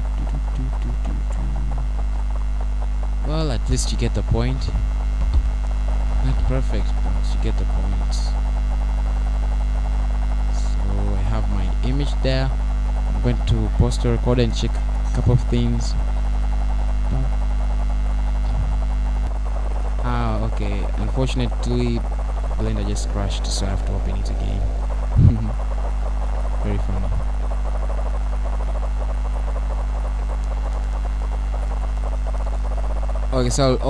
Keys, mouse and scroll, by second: 16.7 middle click, 21.6 scroll down 1.